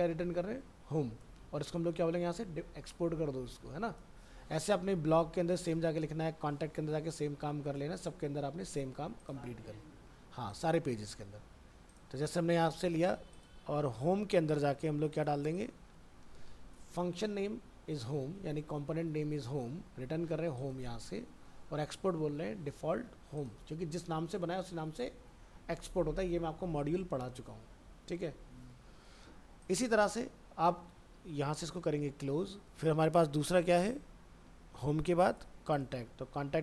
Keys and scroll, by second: 11.1 ctrl+c, 15.9 ctrl+v, 32.3 ctrl+w, 36.0 alt+Tab.